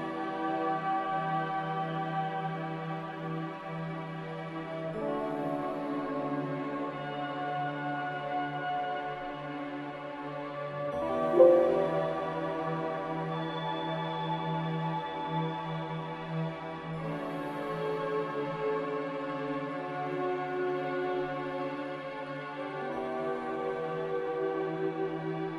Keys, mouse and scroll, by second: 7.5 ctrl+c, 8.1 ctrl+r.